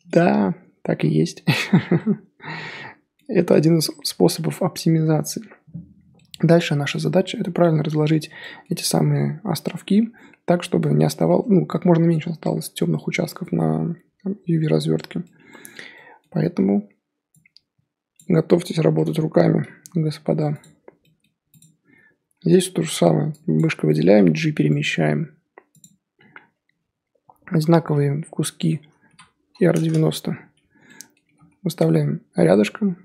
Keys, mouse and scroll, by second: 1.3-1.7 scroll down 3, 1.7 Tab, 2.0-3.5 middle drag, 3.5-3.8 scroll down 1, 3.9 scroll up 1, 4.0 scroll down 1, 4.2 scroll up 1, 4.3 Tab, 15.0-18.1 middle drag, 18.1 click, 19.0 n, 19.8 g, 21.6 click, 24.3 g, 25.8 click, 27.2 l, 27.5 l, 29.1 r, 31.2 g.